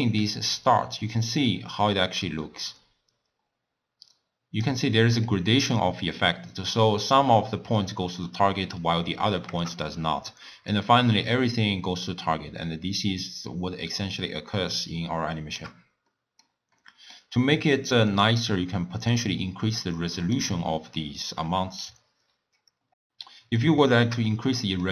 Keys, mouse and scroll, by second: 5.2 middle click, 5.7-7.4 scroll up 1, 7.4-9.5 middle drag, 9.5 KP_0, 10.7-13.7 shift+drag, 16.1-18.2 middle drag, 18.2-22.9 drag, 22.9 scroll down 1, 23.3-24.9 middle drag.